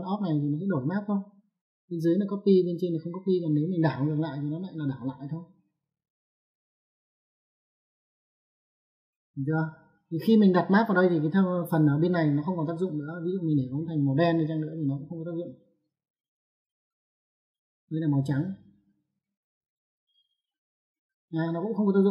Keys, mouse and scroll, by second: 0.1 middle click, 0.6 click, 5.5 click, 7.1 click, 8.4 click, 13.7 click, 15.5 click, 17.4 click, 20.3 click, 21.5 click.